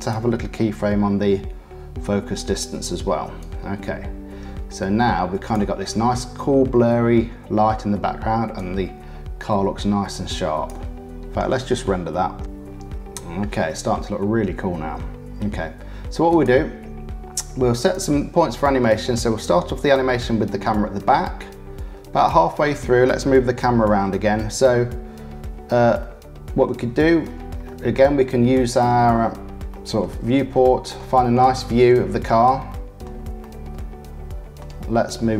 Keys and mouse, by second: 3.3-5.5 drag, 5.5-8.5 middle drag, 8.5-10.6 drag, 10.6 middle click, 17.7 click, 19.5-22.2 drag, 22.2-23.7 middle drag, 26.0 click, 27.6 click, 28.2 shift+click, 29.2 middle click, 29.7 click, 30.0 middle click, 30.9 shift+middle click, 31.9 middle click, 33.0 middle click, 34.6 middle click.